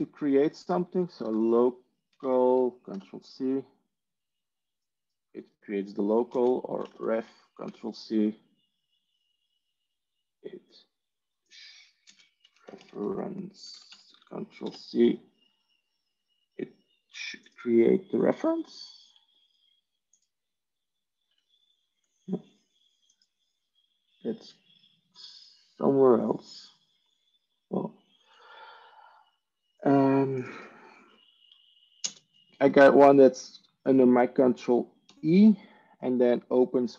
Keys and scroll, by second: 0.8-2.6 typing, 2.8 ctrl+c, 6.2 ctrl+space, 6.3-7.5 typing, 7.5 ctrl+c, 11.9 ctrl+space, 12.3-14.3 typing, 14.6 ctrl+c, 32.6 ctrl+space, 34.9 ctrl+e.